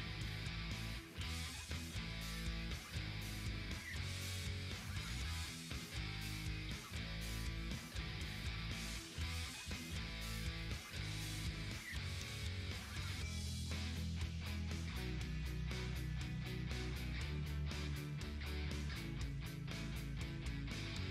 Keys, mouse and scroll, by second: 1.0-4.6 drag, 4.6 scroll up 1, 5.8 click, 6.5 ctrl+scroll down 1, 7.3 click, 8.2 ctrl+scroll down 1, 8.3-9.6 typing, 8.5 scroll up 1, 8.9 scroll down 2, 9.3 ctrl+scroll up 1, 9.5 ctrl+scroll down 1, 10.0 ctrl+scroll up 2, 10.4 scroll down 2, 10.8 ctrl+scroll up 1, 11.2 scroll down 1, 11.7 ctrl+scroll down 1, 12.2 scroll up 1, 12.3-13.4 typing, 13.4-15.1 drag, 15.1-15.6 ctrl+scroll down 2, 15.5-19.4 typing, 17.3 ctrl+scroll down 1, 17.7 ctrl+scroll up 1, 19.0 click, 19.7 ctrl+scroll up 1, 20.8-21.1 typing.